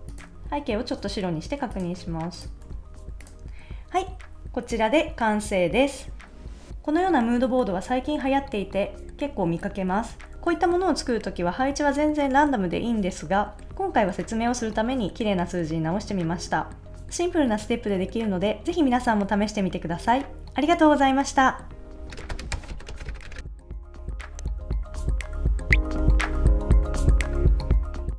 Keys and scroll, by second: 2.6 super+s.